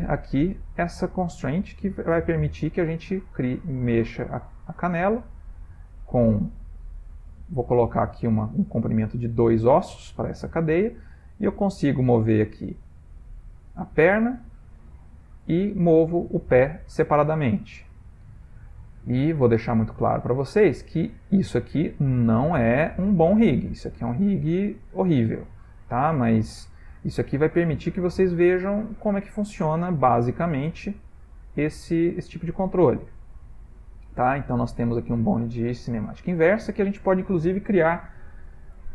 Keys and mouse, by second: 1.8 g, 5.5 click, 6.0 click, 7.6 middle click, 8.1 middle click, 10.8 g, 15.3 click, 15.5 r, 17.9 click, 18.1 g, 20.5 click, 21.0 g, 22.6 r, 24.4 click, 24.5 g, 36.0 click.